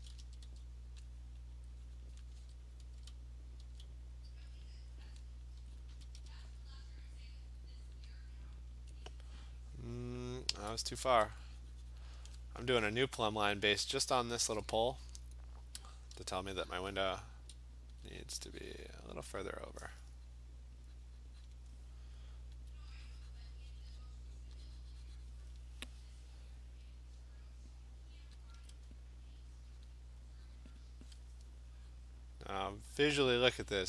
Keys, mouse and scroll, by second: 0.2 [, 0.5 [, 1.4 click, 2.1 click, 2.5 ], 3.0 ], 3.7 [, 4.7 click, 5.1 click, 5.9 click, 6.1 ], 6.3 ], 6.7 click, 7.3 click, 7.5 click, 7.8 click, 8.0 click, 8.3 click, 8.5 click, 11.2 alt+click, 12.0 click, 12.9 click, 14.4 click, 16.6 alt+click, 17.4 alt+click, 18.0 alt+click, 19.3 click, 19.9 alt+click, 20.8 click, 21.5 click, 21.7 alt+click, 22.3 alt+click, 22.6 alt+click, 23.9 click, 24.1 click, 24.5 click, 24.9 alt+click, 25.5 click, 28.6 alt+click, 28.6 alt+click, 29.4 click, 29.9 click, 30.5 alt+click, 30.8 click, 30.8 alt+click.